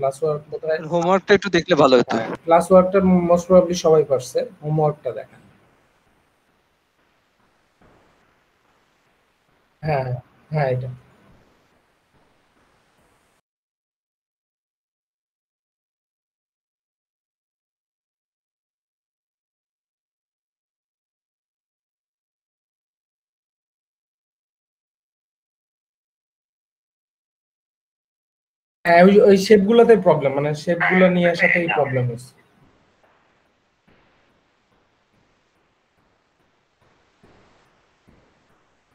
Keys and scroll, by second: 0.3 ctrl+space, 1.8 ctrl+space, 14.2 ctrl+v, 14.8 ctrl+space, 15.6 ctrl+space, 16.4 …, 20.5 space, 23.9 ctrl+shift+space, 38.6 ctrl+space.